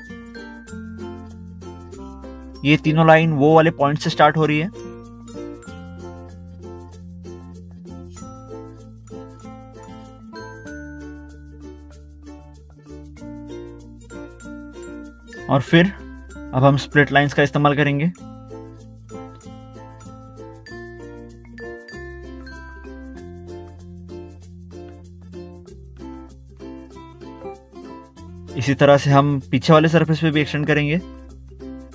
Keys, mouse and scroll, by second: 1.4 ctrl+8, 2.0 scroll down 1, 3.4 click, 3.5 Delete, 5.0 Delete, 5.0 click, 6.6 click, 6.8 click, 8.9 click, 9.6 Escape, 10.3 click, 11.3 middle click, 11.8 middle click, 13.4 click, 13.6 scroll up 1, 13.7 scroll down 1, 14.4 ctrl+8, 14.6 scroll down 1, 15.9 ctrl+3, 16.2 ctrl+2, 16.3 scroll down 1, 17.2 scroll down 1, 18.0 scroll up 1, 18.1 scroll down 1, 18.5 ctrl+2, 18.8 ctrl+1, 19.1 scroll down 1, 19.4 middle click, 19.6 scroll up 1, 19.8 middle click, 20.0 middle click, 20.1 scroll down 1, 20.6 click, 21.3 middle click, 22.7 middle click, 24.5 middle click, 24.6 middle click, 24.9 middle click, 25.3 scroll down 1, 27.0 click, 28.9 middle click, 29.2 middle click, 29.9 scroll up 1, 30.3 middle click, 30.3 middle click, 30.8 click, 31.1 click, 31.5 scroll down 1.